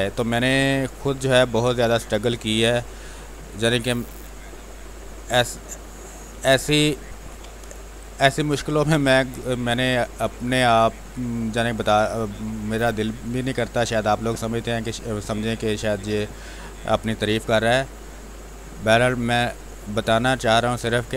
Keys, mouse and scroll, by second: 2.2 space, 2.5 alt+click, 7.2 b, 7.6 space, 7.8 ctrl+click, 8.4-13.3 drag, 13.3 space, 13.5 click, 13.8 space, 15.2-16.5 drag, 16.5-20.0 drag, 20.0-21.1 drag.